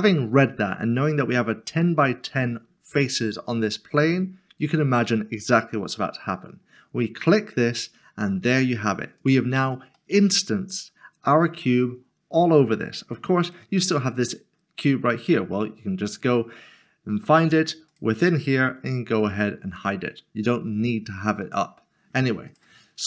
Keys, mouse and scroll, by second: 7.2 click, 9.9 middle click, 13.4 click, 17.9 click, 21.4 click, 23.0 click.